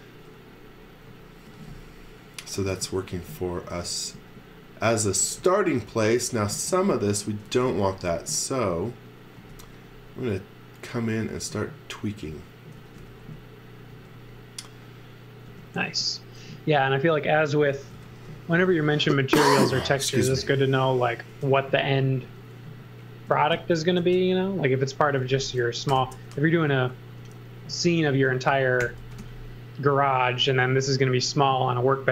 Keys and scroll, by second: 1.2-5.4 typing, 6.5 space, 7.2 x, 7.6 v, 8.6 v, 9.4 space, 12.5-13.9 typing, 15.5 m, 17.5-18.5 typing, 23.5 super+x, 24.0 space, 25.9 alt+shift+v, 27.2 m, 28.6-30.5 typing.